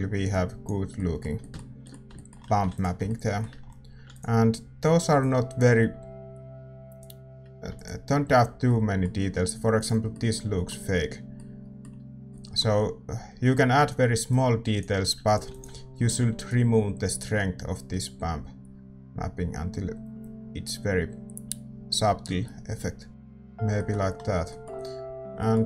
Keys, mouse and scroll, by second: 0.3-3.7 drag, 0.9-5.6 middle drag, 3.7 ctrl+s, 4.7 ctrl+s, 5.2-8.8 drag, 8.8-14.3 middle drag, 9.7-11.8 drag, 14.3-25.6 drag, 16.7 ctrl+s, 23.1 ctrl+s.